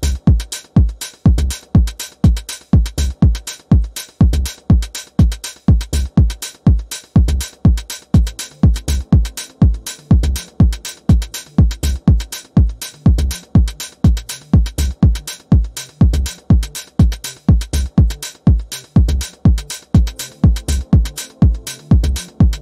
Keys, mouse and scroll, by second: 3.6-4.7 typing, 5.6-7.5 drag, 7.9-8.7 ctrl+scroll down 2, 8.7 click, 13.8 typing, 14.4 Return, 15.4 click, 16.6 ctrl+d, 17.8-20.2 alt+shift+drag, 22.0 click, 22.5-22.6 ctrl+scroll down 1.